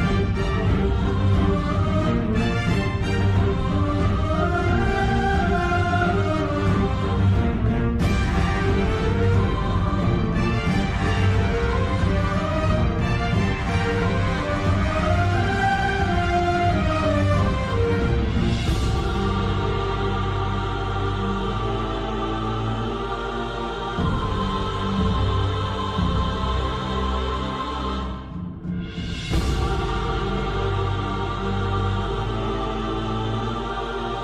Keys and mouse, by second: 2.7-3.8 middle drag, 4.0 middle click, 5.5 click, 6.9 KP_1, 7.8 shift+middle click, 9.8 s, 13.9 Tab, 14.3-16.6 middle drag, 17.3 middle click, 18.7 middle click, 19.4 Tab, 20.5-21.9 drag, 21.9 KP_7, 23.2 shift+middle click, 24.2 shift+d, 26.0 p, 27.1 Tab, 27.5 middle click, 31.4 click, 32.5 click, 33.2 KP_3.